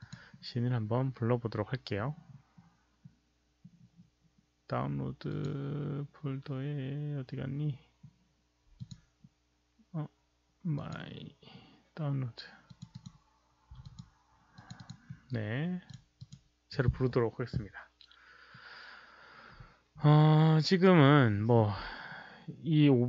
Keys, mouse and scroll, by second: 5.2 click, 8.7 click, 10.7 click, 12.6 click, 12.9 click, 13.8 click, 14.5 click, 14.7 click, 15.8 click, 16.1 click, 16.9 click, 17.2 click, 20.8 click, 21.1 click.